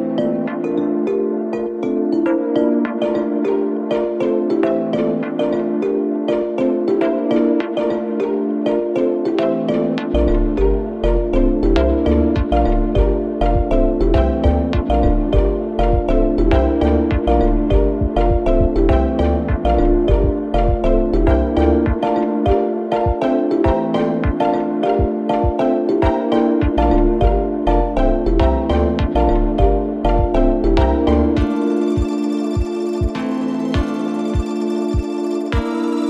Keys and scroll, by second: 1.3 ctrl+z, 3.1 4, 3.9 3, 4.5 ], 5.5 4, 11.9 3, 12.5 ], 13.8 4, 20.6 F9, 29.3 0, 33.3 ;.